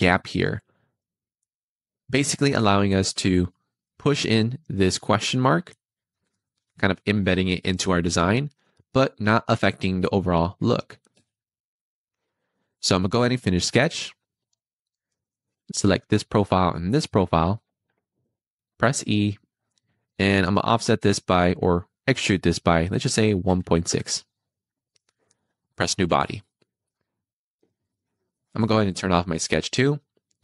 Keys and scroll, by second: 11.0 Escape, 18.7 e, 23.3 1, 23.5 ., 23.9 6.